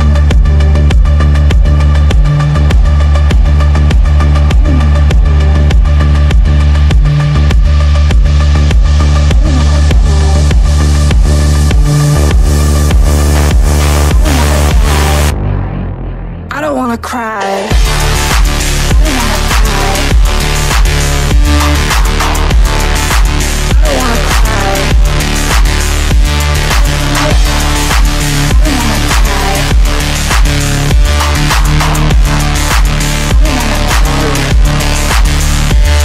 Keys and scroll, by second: 11.2 F3, 17.0 Delete, 20.7 Delete, 31.8-35.0 typing.